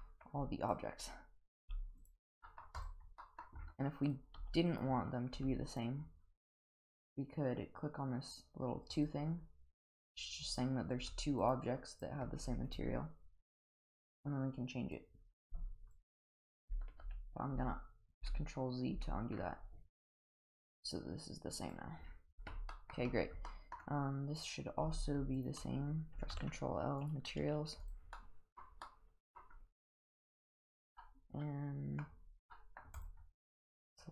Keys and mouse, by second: 0.0 middle drag, 0.7 click, 1.6 g, 2.4 middle drag, 2.8 click, 3.2 middle drag, 4.1 click, 4.4 g, 5.7 g, 9.0 click, 10.5 click, 11.0 g, 11.9 click, 12.4 g, 13.6 click, 13.9 click, 17.0 ctrl+z, 17.5 ctrl+z, 18.5 ctrl+z, 19.0 ctrl+z, 20.6 click, 22.3 click, 22.7 middle drag, 23.4 middle drag, 24.4 click, 25.3 shift+click, 26.3 ctrl+l, 27.8 click, 28.1-28.5 middle drag, 28.8-29.3 middle drag, 31.0 middle drag, 31.6-32.0 middle drag, 32.5 middle drag, 33.0 click, 33.8 click.